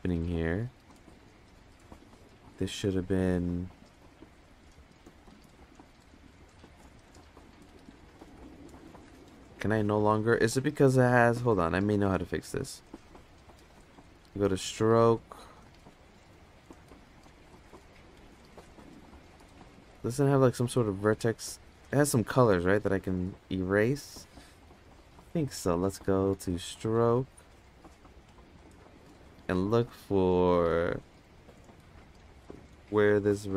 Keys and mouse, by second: 1.8 click, 4.2 Tab, 4.2 click, 5.4 click, 5.7 click, 5.8 click, 6.0 click, 6.2 click, 6.3 click, 6.4 click, 6.6 click, 6.8 click, 8.9 click, 9.4 click, 14.0 click, 19.7 click, 21.6 click, 24.9-25.3 drag, 27.7 click.